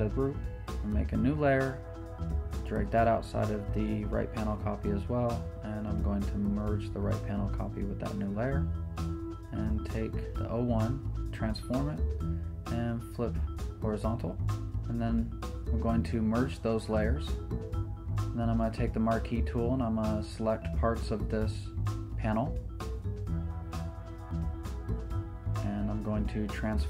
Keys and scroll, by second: 2.1 shift+super+n, 2.4 Return, 10.2 super+t, 12.1 super+Return, 20.1 super+t, 21.2 super+d, 22.5 super+t, 23.0 super+Return, 23.2 super+d, 24.2 super+t, 25.2 Escape, 26.1 super+t.